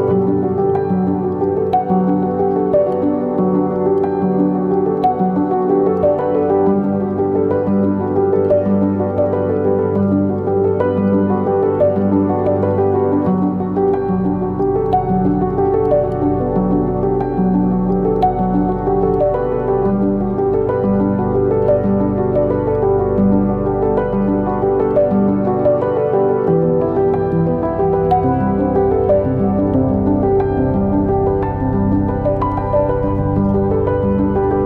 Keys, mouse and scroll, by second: 0.4 Right, 0.5 KP_0, 0.7 scroll up 1, 0.9 ctrl+z, 4.0-5.1 middle drag, 4.3 scroll down 1, 5.1 click, 5.5 z, 5.8 click, 6.1 scroll up 1, 6.8 g, 15.0-16.4 middle drag, 16.4 click, 18.0-20.7 middle drag, 20.7 click, 23.6 click, 23.7-24.1 scroll up 1, 24.2 click, 24.8 click, 25.0 g, 25.6 click, 25.9 g, 28.6 Tab, 28.8 click, 29.1 scroll up 1, 29.3-29.7 scroll down 1, 29.7 click, 29.9 scroll down 2, 30.1-31.4 shift+middle drag, 30.2 scroll up 2, 30.6 scroll down 2, 30.8 scroll up 2, 31.0-31.4 scroll down 2, 31.4-33.1 shift+right drag, 33.6-34.0 scroll up 1, 34.0 right click, 34.2 ctrl+right click.